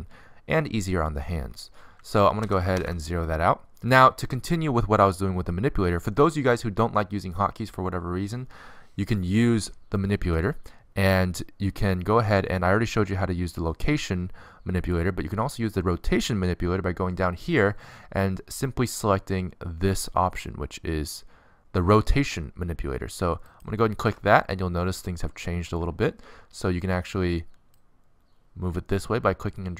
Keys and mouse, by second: 3.6 alt+r, 3.7 alt+g, 5.2 alt+s, 23.8-27.0 drag, 27.0 middle click, 27.9-29.3 middle drag, 29.3 click.